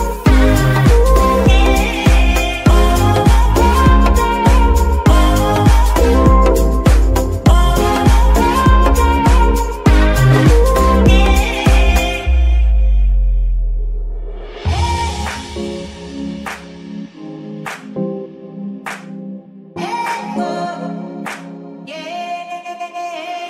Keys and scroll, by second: 0.0 z, 2.9 alt+g, 3.3 alt+z, 10.8 KP_3, 21.3 alt+g, 23.1 Escape.